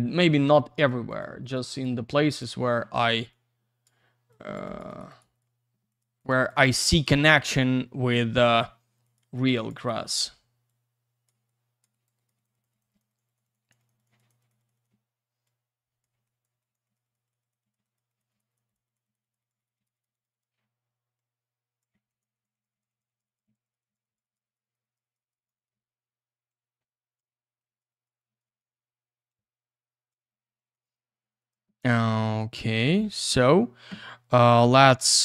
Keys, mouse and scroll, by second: 0.5 click, 1.1 click, 1.2 click, 1.4 click, 1.5 double click, 1.7 click, 1.8 click, 2.3 click, 2.4 click, 3.3 click, 4.3 click, 4.6 click, 4.8 click, 4.9 click, 5.0 double click, 5.1 click, 5.2 click, 5.3 click, 5.4 double click, 5.9 click, 6.0 click, 6.2 click, 6.3 double click, 6.4 click, 6.5 click, 9.0 click, 9.1 click, 9.3 click, 9.4 click, 9.5 click, 9.7 double click, 9.7 click, 9.8 click, 10.7 click, 11.5 click, 11.9 click, 12.0 click, 12.1 click, 12.2 double click, 12.3 click, 12.4 click, 12.5 click, 12.6 double click, 12.7 click, 12.8 click, 12.9 click, 13.0 double click, 13.1 click, 13.1 click, 13.2 click, 13.3 double click, 13.4 click, 13.5 click, 13.6 click, 13.7 double click, 13.8 click, 13.9 click, 14.0 click, 14.0 double click, 14.1 click, 14.3 click, 14.4 click, 14.5 double click, 14.6 click, 14.7 click, 14.7 click, 14.8 double click, 15.4 click, 16.2 click, 16.4 click, 16.6 click, 16.7 double click, 16.8 click, 16.9 click, 17.0 click, 17.1 double click, 17.3 click, 17.5 double click, 17.6 click, 17.7 click, 17.8 click, 17.9 double click, 18.1 click, 18.2 click, 18.3 click, 18.4 double click, 18.5 click, 18.5 click, 18.7 click, 18.7 double click, 18.8 click, 18.9 click, 19.0 click, 19.1 double click, 19.2 click, 19.3 click, 19.4 click, 19.5 double click, 19.6 click, 19.6 click, 19.7 click, 19.8 double click, 19.9 click, 20.0 click, 20.1 click, 20.2 double click, 20.3 click, 20.4 click, 21.2 click, 22.1 click, 22.2 click, 22.3 click, 22.4 double click, 22.5 click, 22.6 click, 22.7 click, 22.8 double click, 22.9 click, 23.0 click, 23.1 click, 23.5 double click, 23.6 click, 23.7 click, 23.8 click, 23.9 double click, 24.0 click, 24.1 click, 24.2 click, 24.5 click, 24.6 click, 24.7 double click, 24.8 click, 24.9 click, 25.0 click, 25.1 double click, 25.3 click, 25.4 double click, 25.5 click, 25.6 click, 26.5 click, 27.6 click, 27.9 click, 28.0 click, 28.2 click, 28.4 double click, 28.6 click, 29.3 click, 30.7 click, 30.8 click, 30.9 double click, 31.0 click, 31.1 click, 31.2 click, 31.3 double click, 31.4 click, 31.5 click, 32.2 click.